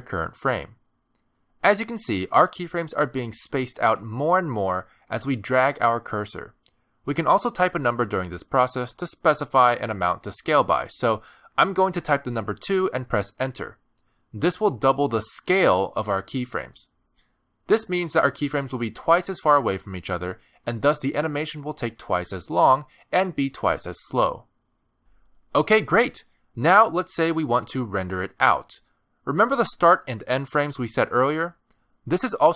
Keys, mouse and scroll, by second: 22.6 space, 31.8 space.